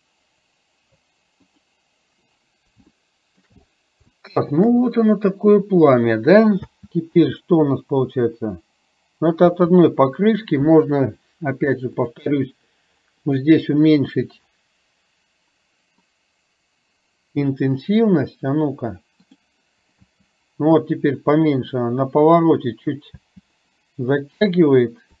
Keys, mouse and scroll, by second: 3.0-3.5 shift+middle drag, 4.4 shift+middle click, 6.6 space, 9.5 space, 12.1 click, 16.1-18.1 drag, 19.3 click, 20.0 space, 23.1 space.